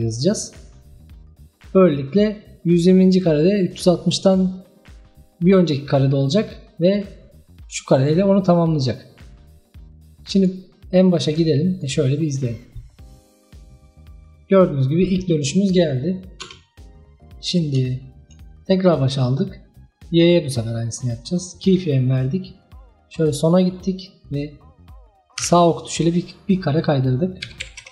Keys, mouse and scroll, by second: 7.0-10.0 drag, 11.3 click, 11.8-14.8 drag, 16.5 space, 17.5 scroll down 1, 18.1-18.9 shift+middle drag, 18.9-21.8 drag, 23.2 click, 25.4 Right, 26.7-27.9 drag.